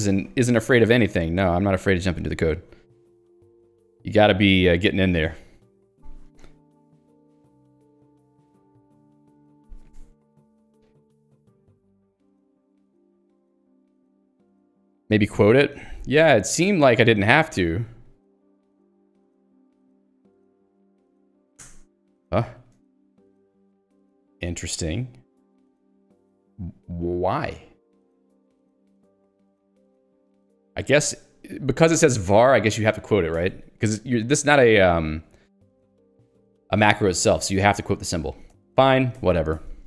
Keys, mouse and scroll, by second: 16.8 click, 17.2 l, 17.9 Escape, 18.5-21.5 typing, 19.0 Escape, 21.6 alt+Return, 23.0 Escape, 31.5 click, 31.9 Escape, 39.5 click.